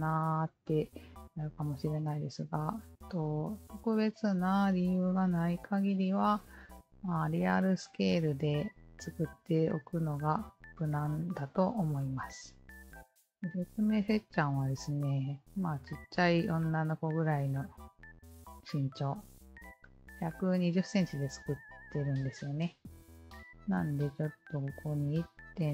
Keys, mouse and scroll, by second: 3.1 alt+click, 9.5 alt+click, 13.5 KP_1, 14.2 KP_Decimal, 16.8 KP_2, 21.8 Return, 23.5-25.7 alt+drag.